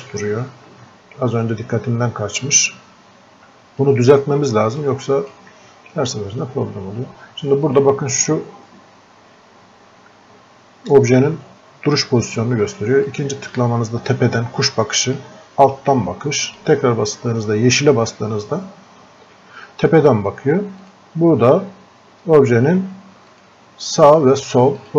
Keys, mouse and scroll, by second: 7.7 click, 10.1 typing, 13.1 click, 20.9 click, 23.3-24.9 drag.